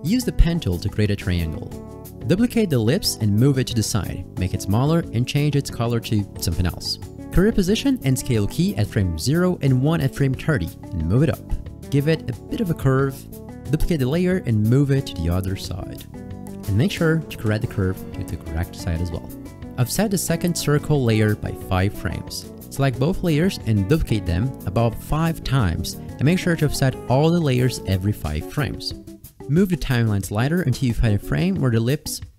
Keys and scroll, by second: 2.1 ctrl+d, 8.9 ctrl+Right, 9.2 ctrl+Right, 13.6 ctrl+d, 23.0 ctrl+d, 23.6 ctrl+d, 24.0 ctrl+d, 24.6 ctrl+d.